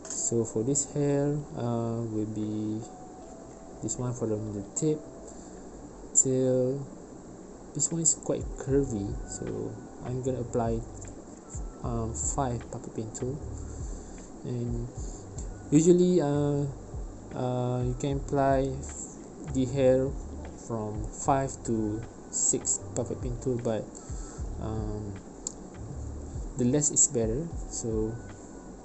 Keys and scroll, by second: 2.8 ctrl+alt+p, 26.6 3, 26.7 Return.